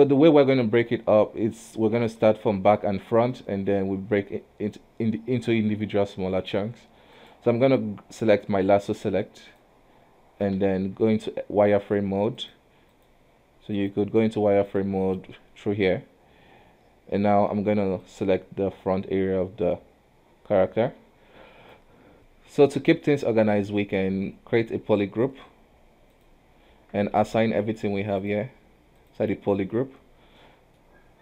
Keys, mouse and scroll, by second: 0.4-2.4 middle drag, 2.4 KP_7, 7.3-10.7 drag, 10.7 shift+z, 12.5-14.0 drag, 14.7 click, 15.1 click, 18.2 click, 22.1 KP_1, 23.1-25.1 middle drag, 25.1 Tab, 26.2 click, 26.8 Tab, 27.3 a, 28.3-30.5 drag, 30.5 middle click.